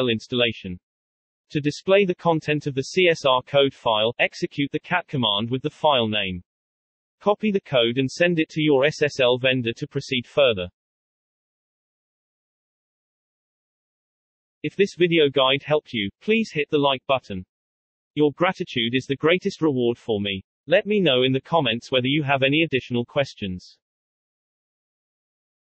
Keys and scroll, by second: 1.6-4.9 typing, 5.4 Return.